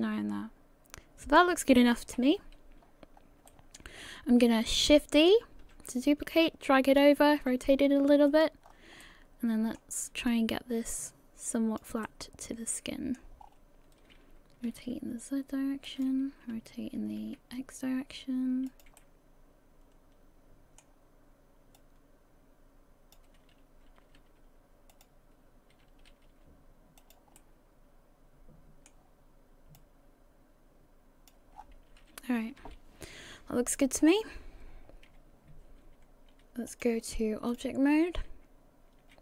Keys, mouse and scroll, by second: 2.1 KP_1, 2.8-3.2 scroll down 3, 3.2 scroll up 2, 3.5 shift+middle click, 5.3 shift+d, 7.4 r, 8.7 scroll down 4, 9.0 middle click, 10.3 click, 12.0 middle click, 13.4-14.7 scroll up 5, 14.7 r, 16.5 r, 19.0 middle click, 21.8 click, 23.9 r, 25.9 r, 27.4 middle click, 29.8 click, 31.6-32.4 scroll down 5, 32.4 a, 32.6 a, 33.2 KP_1, 34.0 scroll down 3, 34.9 scroll down 3, 36.7 click.